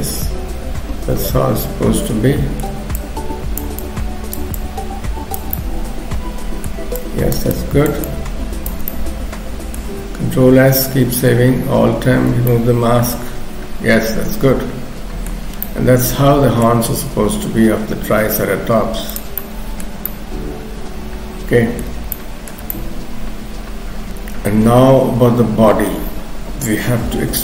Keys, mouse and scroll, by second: 3.0 shift+click, 3.8 shift+click, 5.6 middle click, 7.1 shift+click, 7.6 shift+click, 8.6 shift+click, 8.9 middle click, 10.4 ctrl+s, 12.1 alt+m, 12.5 middle click, 15.5 scroll down 2, 15.6 middle click, 17.9 f, 19.4 middle click, 20.1 middle click, 22.2 shift+middle click, 22.7 middle click.